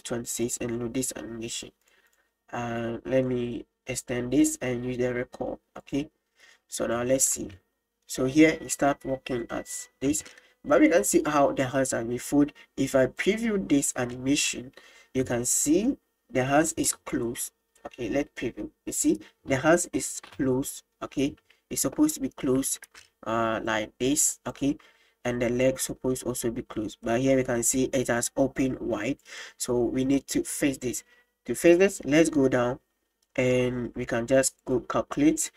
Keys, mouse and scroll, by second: 1.9 right drag, 2.1 right click, 4.0 click, 5.8 click, 7.0 click, 7.5 space, 10.4-11.3 middle drag, 23.0-24.7 d, 23.7 click, 25.9 middle click, 27.1-27.6 middle drag, 34.6-35.5 drag.